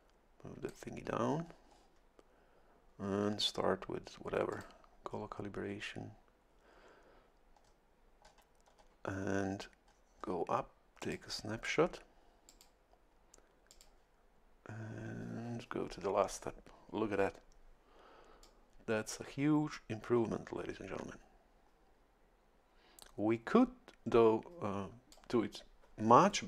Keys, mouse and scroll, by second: 0.0 click, 4.5 click, 7.6 scroll up 2, 8.2-9.0 scroll down 2, 9.8-10.5 scroll up 2, 11.0 click, 12.5 click, 13.7 click, 18.4-25.4 drag.